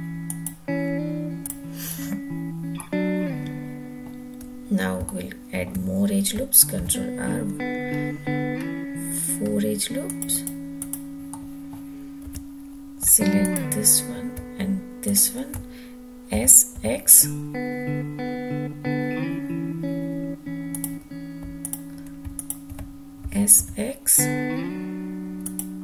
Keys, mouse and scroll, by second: 0.3 click, 2.6-3.1 middle drag, 3.2-3.9 middle drag, 4.9-5.5 shift+middle drag, 6.6 ctrl+r, 10.1 click, 10.6 click, 11.1 middle click, 12.0 2, 13.2 alt+click, 14.9 alt+shift+click, 16.2 s, 16.5 x, 20.6 click, 21.4 alt+click, 22.2 alt+shift+click, 23.0 s, 23.4 x, 25.2 click.